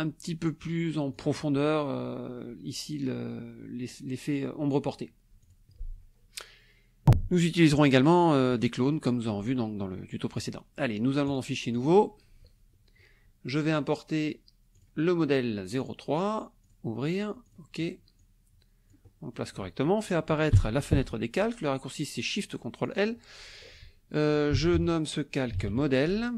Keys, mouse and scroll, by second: 1.1 click, 5.4 click, 11.3 click, 11.7 click, 13.7 click, 14.7 click, 15.8 click, 16.6 click, 17.4 click, 18.2-19.5 drag, 20.5 ctrl+shift+l, 22.8 click, 24.3-26.3 typing.